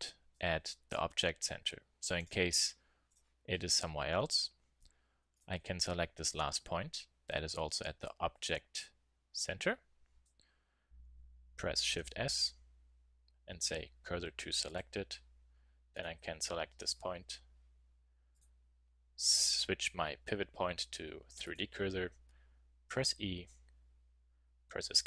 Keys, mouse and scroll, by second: 2.1-5.0 drag, 4.2 a, 5.3 click, 7.1 middle click, 11.9 shift+s, 16.0-17.8 drag, 18.3 click, 20.2 drag, 23.0 e.